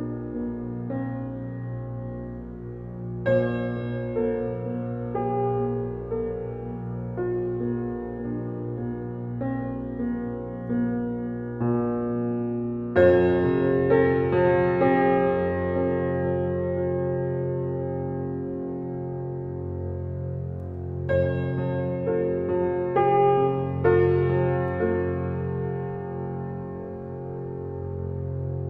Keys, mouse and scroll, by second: 4.4 click, 8.1 click, 9.1 click, 10.4 g, 26.0 click, 27.5-28.3 scroll up 1, 28.3-28.6 scroll up 1.